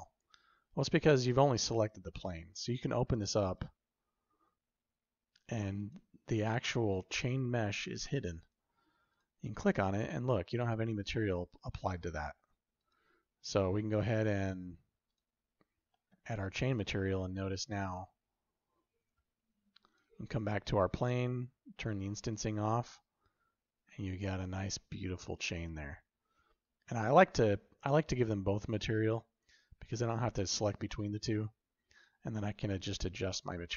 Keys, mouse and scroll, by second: 5.7 click, 8.3 click, 11.4 drag, 12.7-15.1 drag, 15.6 middle click, 16.7-18.9 shift+middle drag, 21.0 click, 22.0 click, 22.6-24.3 shift+middle drag, 28.9 click, 31.8 click.